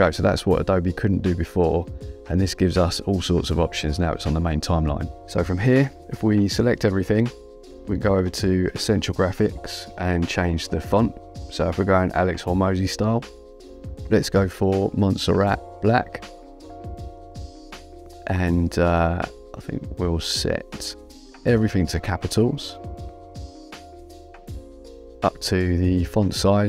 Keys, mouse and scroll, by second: 0.7 click, 7.0 click, 11.9 click, 13.5-14.7 typing, 15.8-17.1 typing, 18.5 click, 23.7 click.